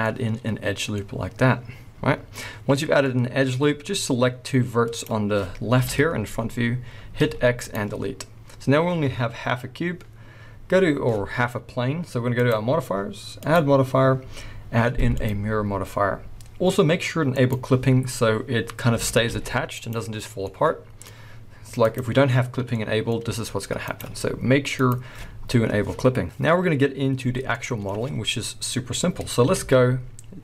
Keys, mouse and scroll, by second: 1.5-3.1 middle drag, 3.1-3.9 scroll down 2, 3.9-5.1 drag, 5.7 KP_1, 7.1 x, 12.4-17.5 drag, 18.9 a, 19.2 g, 19.9 right click, 20.4-21.8 middle drag, 21.8 click, 22.7-23.9 middle drag, 23.2 g, 23.9 right click, 24.7 click, 27.5-30.4 middle drag, 29.4 KP_1, 30.2-30.4 scroll up 2.